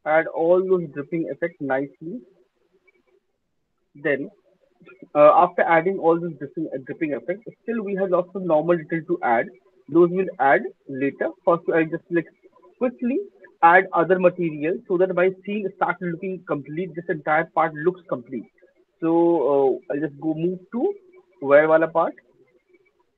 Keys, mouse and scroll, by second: 0.0 alt+middle click, 0.0 alt+click, 0.0 alt+right click, 1.2 alt+click, 1.7 alt+middle click, 2.1 alt+click, 2.5 alt+middle click, 2.9 alt+right click, 3.3 alt+click, 3.7 alt+right click, 6.2 alt+right click, 6.6 alt+middle click, 7.2 alt+click, 10.3 alt+click, 10.7 alt+middle click, 10.9 alt+click, 11.3 alt+middle click, 11.3 alt+click, 12.4 alt+click, 12.6 alt+scroll, 13.0 ctrl+s, 13.7 alt+middle click, 21.2 click.